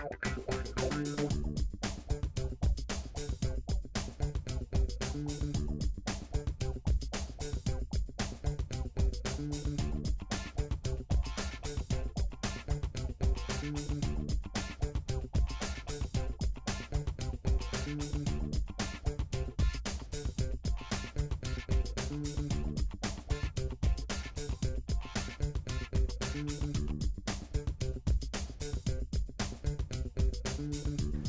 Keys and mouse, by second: 0.7 g, 2.2-10.2 shift+middle drag, 4.4 g, 8.5 r, 10.2-15.0 drag, 12.1 Tab, 12.9 r, 15.1-27.7 middle drag, 18.5 Tab, 19.5 g, 26.3 KP_3, 27.7 click, 28.2-31.2 shift+middle drag.